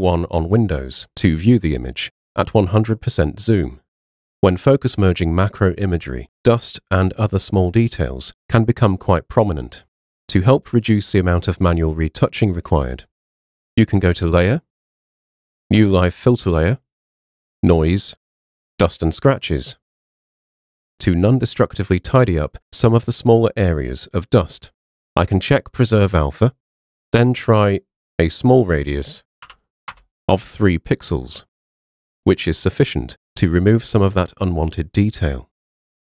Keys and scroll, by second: 29.5 3, 30.0 Return, 32.7 super+1.